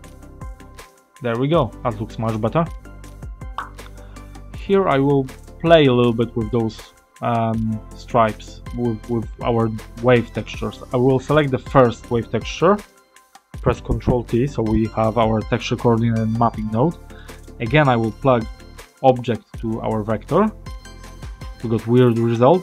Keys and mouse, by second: 1.2 middle click, 4.1 middle click, 7.6 middle click, 9.5 middle click, 11.6 click, 13.8 ctrl+t, 17.0 middle click, 18.0-19.9 drag, 22.4 click.